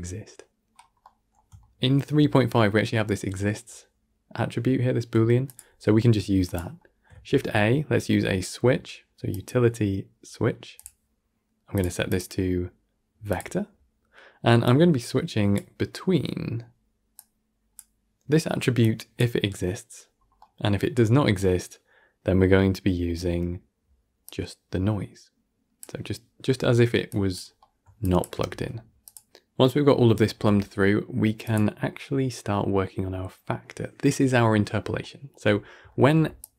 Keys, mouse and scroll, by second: 0.5-0.9 scroll up 8, 0.9-4.5 middle drag, 5.3 click, 5.6 g, 6.7 middle click, 7.0 shift+a, 12.0-14.6 drag, 17.0 click, 18.7 click, 20.0 scroll down 4, 20.3-23.4 middle drag, 24.1 click, 27.0 click, 27.5 middle click, 27.9 shift+click, 28.4 g, 29.2 click, 30.2 g, 34.9-36.1 shift+middle drag, 36.1 d, 36.3 click.